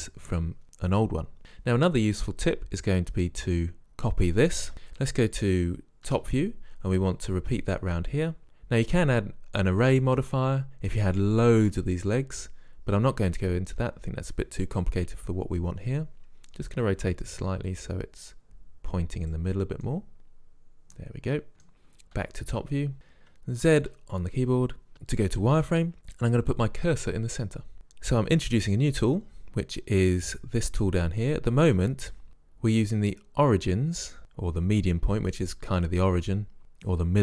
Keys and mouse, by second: 3.7 right click, 4.7 middle click, 6.2 KP_7, 16.7 r, 20.3-21.7 middle drag, 22.2 KP_7, 23.7 z, 31.3 click.